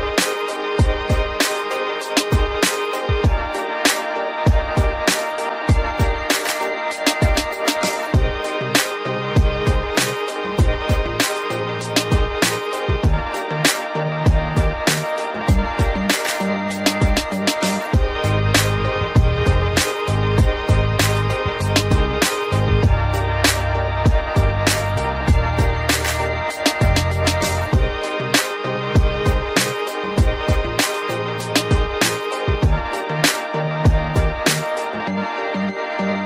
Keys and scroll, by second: 11.4 ctrl+z, 30.9 ctrl+g, 32.3 ctrl+alt+shift+e, 33.4 ctrl+alt+z, 36.1 ctrl+alt+shift+e.